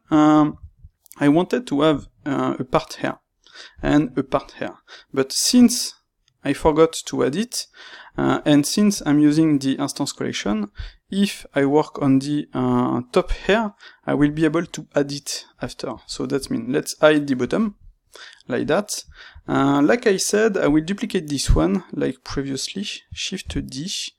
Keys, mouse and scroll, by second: 8.9 click, 8.9-13.4 middle drag, 13.4-15.0 drag, 15.0-17.3 middle drag, 17.3 click, 17.9-20.5 middle drag, 20.5 click, 21.4-24.1 middle drag, 23.5 shift+d.